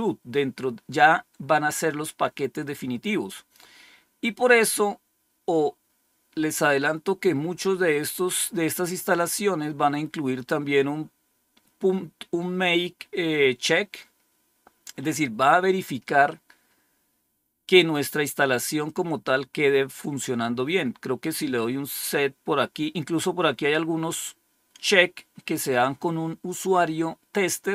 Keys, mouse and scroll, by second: 6.7-7.4 scroll down 2, 19.9 click, 21.6-27.7 scroll down 2.